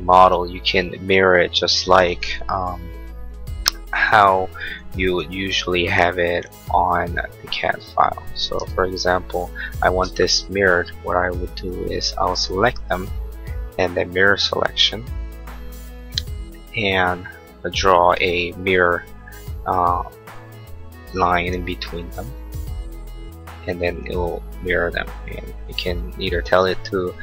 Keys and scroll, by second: 0.3 r, 10.0 space.